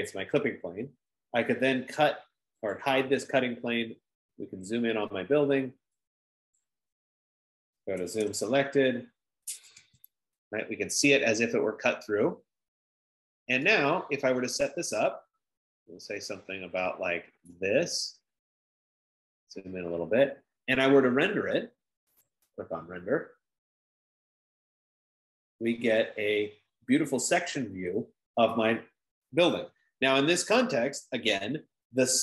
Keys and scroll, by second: 8.3-10.9 typing, 14.5 F15.